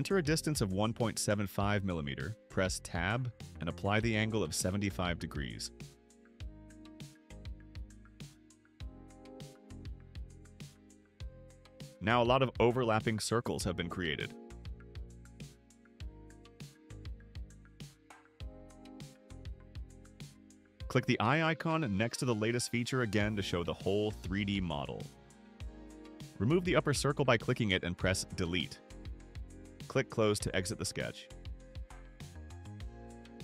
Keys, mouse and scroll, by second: 1.1-3.0 typing, 5.4 Tab, 9.0 Return, 11.5 click, 15.7 right click, 16.5 scroll down 1, 16.6 middle click, 17.2-19.7 right drag, 22.4 click, 23.1 click, 23.8 click, 24.6 right click, 25.2 right click, 27.4 click, 33.1 click.